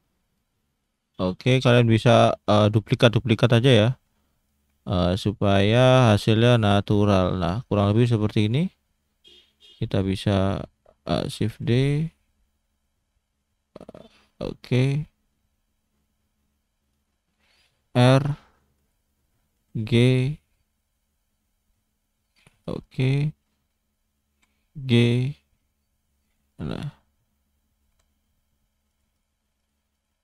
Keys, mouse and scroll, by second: 1.2 shift+d, 3.6 shift+d, 4.7 shift+d, 6.6 click, 7.0 scroll down 1, 7.3 middle click, 7.9-8.3 scroll up 2, 8.3 scroll down 1, 8.4 middle click, 9.2 click, 9.5-10.0 scroll down 1, 10.0 click, 10.6 shift+middle click, 11.5 shift+d, 18.0 r, 22.6 click, 22.8 click, 24.3 g, 26.5 click, 26.8 click, 27.9 g, 29.1 click, 29.6 click, 29.9 click.